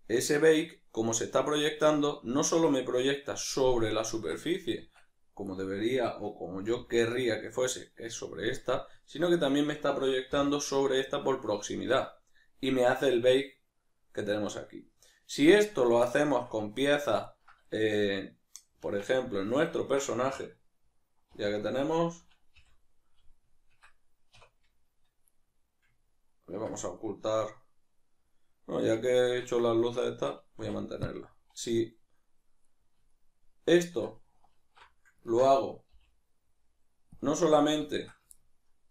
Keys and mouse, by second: 5.5 right click, 6.7 l, 9.4 right click, 10.3 l, 15.0-18.8 ctrl+middle drag, 18.8 Tab, 19.4-28.8 ctrl+middle drag, 21.3 alt+h, 28.8-29.8 right drag, 30.0 shift+right click, 30.6 x, 32.6-34.6 right drag, 34.6 alt+q, 35.3-38.9 ctrl+middle drag, 36.0 g.